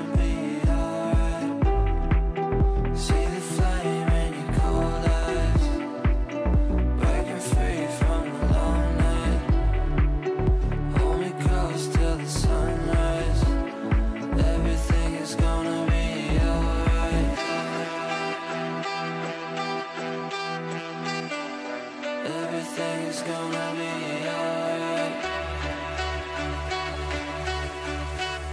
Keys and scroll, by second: 2.2 ctrl+r, 25.2 c, 25.5 e.